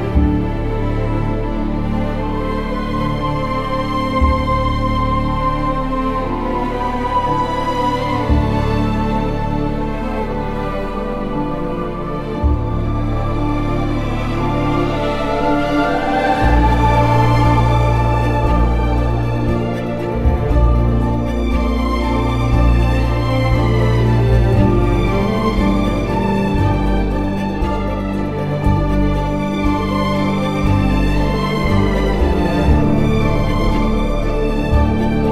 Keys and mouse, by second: 4.6 click, 5.5 ctrl+a, 6.0 Tab, 6.6 click, 9.9 g, 10.1 y, 12.3 Tab, 15.3 Tab, 16.0 middle drag, 17.2 a, 17.8 KP_3, 18.5 z, 19.6 alt+z, 20.2 click, 22.4 alt+z, 23.2 g, 23.4 y, 24.4 click, 25.0 o, 27.4 g, 27.6 y, 28.9 click, 29.2 z, 30.2 Tab.